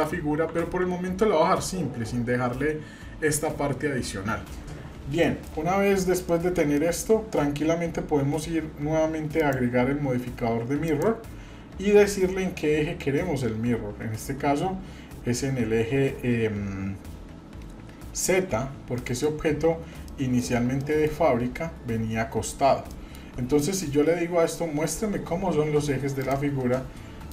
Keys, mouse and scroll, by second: 0.5 Tab, 5.2 middle click, 5.8 scroll down 2, 6.3 middle click, 6.8 shift+middle click, 9.4 click, 13.5 scroll down 2, 19.0 middle click, 19.6-19.9 scroll up 1, 20.1-20.6 shift+middle drag, 20.8 middle click, 22.5 scroll down 2, 22.9-23.3 shift+middle drag, 23.6 middle drag, 26.2 click, 26.7-27.3 middle drag.